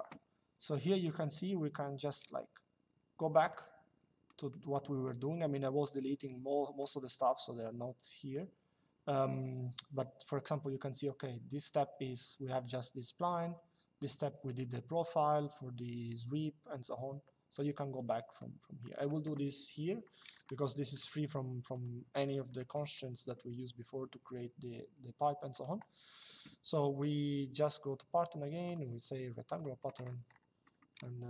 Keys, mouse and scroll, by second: 1.0 click, 4.0 click, 6.5 click, 18.1 click, 19.8 middle click, 20.1 shift+middle click, 21.4 click, 25.2 click, 28.4 click, 30.3 middle click.